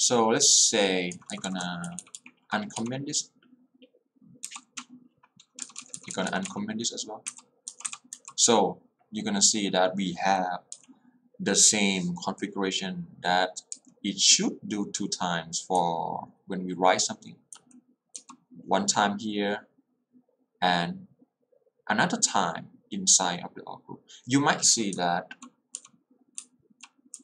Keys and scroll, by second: 1.2 k, 1.9 h, 4.5 x, 5.8 k, 7.2-8.6 typing, 10.9 k, 15.8 l, 18.2 j, 25.4 j, 26.5-27.2 typing.